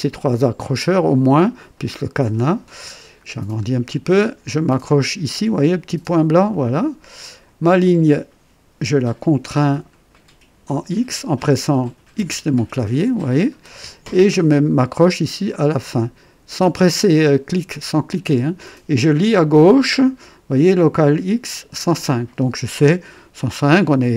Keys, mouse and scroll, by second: 3.1-3.6 scroll up 2, 6.5 click, 9.6 scroll down 2, 10.1 right click, 12.1 x.